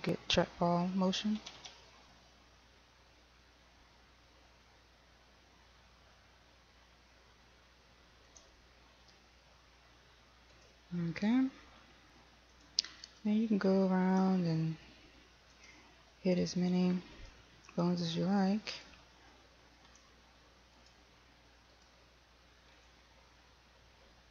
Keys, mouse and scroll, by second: 1.6 r, 8.6 r, 10.8 y, 12.8 click, 13.3 right click, 14.4 r, 15.8 click, 16.6 right click, 19.0 right click, 20.2 r, 21.0 click, 22.0 right click, 23.1 r.